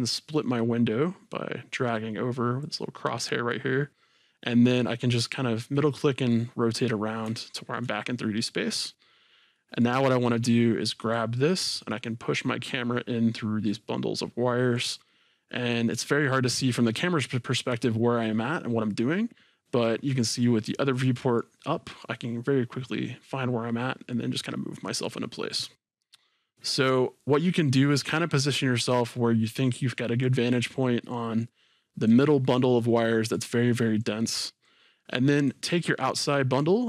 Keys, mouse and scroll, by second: 1.9-5.8 drag, 5.8-11.1 middle drag, 6.5-7.4 scroll down 2, 9.0-9.6 scroll up 2, 10.0-11.1 scroll down 2, 11.1-15.1 drag, 15.1-22.0 middle drag, 22.0-32.8 drag, 32.8-34.0 middle drag, 34.0-35.5 drag.